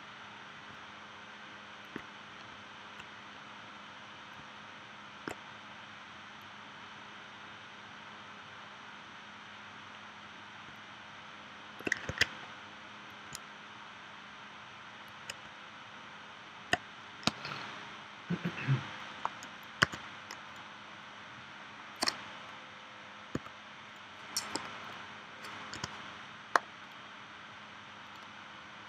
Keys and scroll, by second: 12.1 super+z, 17.3 space, 19.8 v, 23.3 i, 25.7 v.